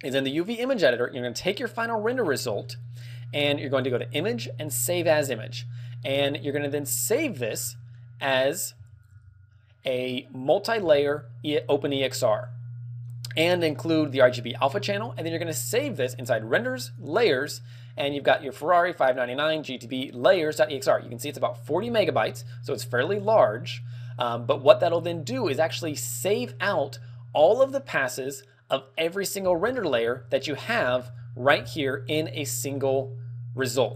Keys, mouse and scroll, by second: 1.0-1.4 scroll down 2, 2.1 middle click, 3.5 click, 27.7 click, 28.8 middle click.